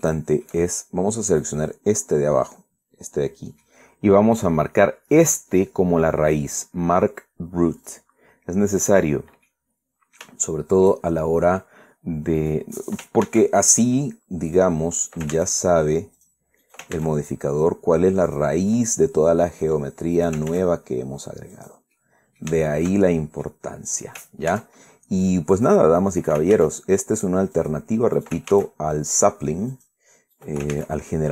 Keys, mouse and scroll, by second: 0.3-0.7 shift+scroll up 2, 0.7 shift+middle click, 2.0 right click, 2.8 middle click, 3.4 scroll up 2, 8.5 click, 9.7 scroll down 2, 10.2-11.8 middle drag, 11.9-12.4 shift+scroll up 3, 13.1 right click, 13.9 ctrl+a, 15.2 click, 15.7 ctrl+right click, 16.0 ctrl+a, 16.9 click, 17.3 ctrl+right click, 17.6 ctrl+a, 19.0 click, 19.4-20.5 middle drag, 20.9 ctrl+right click, 21.2 ctrl+a, 22.2 click, 23.1 middle click, 23.2 Caps_Lock, 23.4 middle click, 24.6 ctrl+right click, 25.2 ctrl+a, 26.2 click, 26.9 ctrl+right click, 27.2 ctrl+a, 28.3 click, 28.9 ctrl+right click, 29.2 ctrl+a, 30.4 click, 31.0 right click.